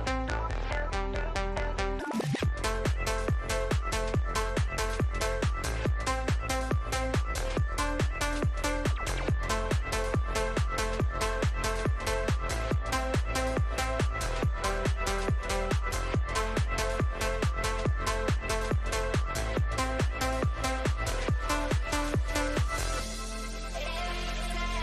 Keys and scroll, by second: 18.3 space, 18.8 F3, 18.9 Escape, 21.6 Delete.